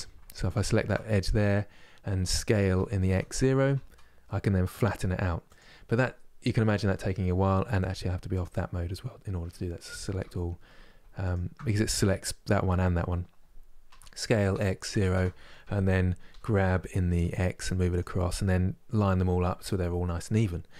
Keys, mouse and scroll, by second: 0.2 alt+click, 2.4 s, 9.9 a, 11.0 alt+click, 13.5 s, 15.9 g.